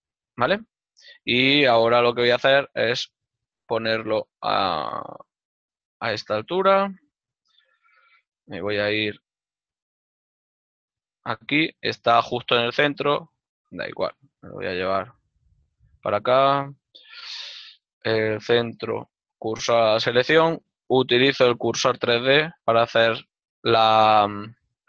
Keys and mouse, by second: 2.1 z, 6.7 ctrl+click, 7.9-8.9 typing, 12.0 click, 13.9 shift+middle click, 14.4 x, 20.8 right click.